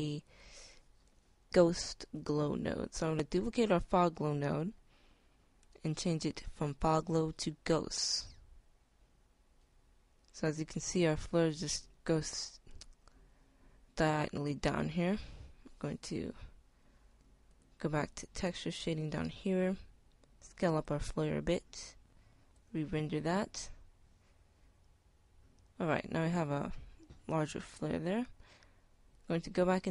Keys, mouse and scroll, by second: 2.3 shift+d, 4.8 click, 17.9-18.3 right drag, 19.7 s, 22.6 F12.